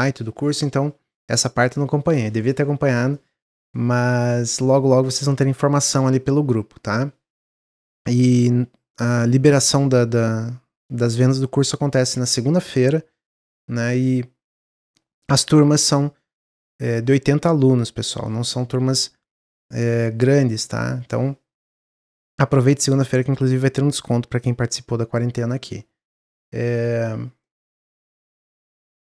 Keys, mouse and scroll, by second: 27.4-29.1 middle drag.